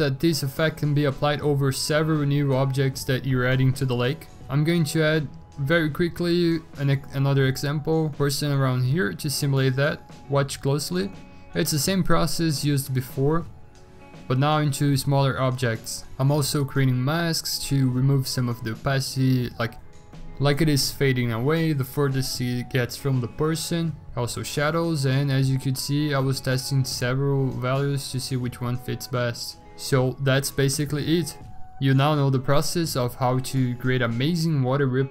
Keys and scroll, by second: 0.5 v, 1.1 ctrl+t, 3.7 ctrl+t, 4.9 scroll, 5.2 scroll down 10, 6.0 ctrl+z, 6.3 ctrl+j, 7.2 ctrl+t, 10.8 b, 11.3 x, 13.0 0, 14.3 x, 14.5 x, 20.9 5, 21.0 5, 23.4-24.3 typing, 25.9 typing, 26.9 v, 29.6 b, 30.5 b, 31.8 x, 32.1 x, 32.4 ctrl+z, 33.6 ctrl+z, 33.7 3, 34.3 ctrl+z.